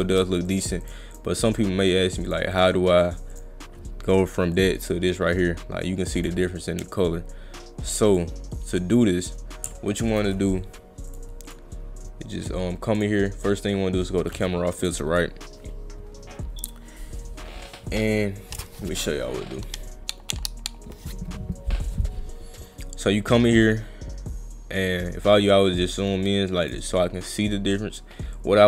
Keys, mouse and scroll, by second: 0.0 click, 0.5 click, 0.8 click, 1.1 click, 1.5 click, 2.3 click, 2.5 click, 3.3 click, 4.6 click, 6.2 click, 7.1 scroll up 2, 8.1 click, 11.1 click, 11.5 click, 13.0 click, 14.8 click, 23.2-26.7 drag, 28.4-28.6 drag.